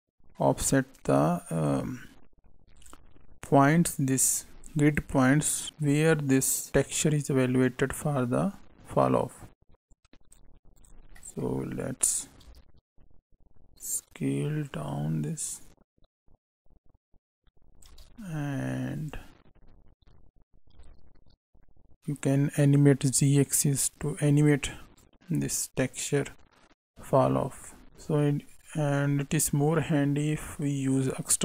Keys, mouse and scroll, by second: 4.1 click, 9.8 click, 10.7 click, 11.1 middle click, 12.0 click, 18.9 click, 19.9 click, 25.0 click.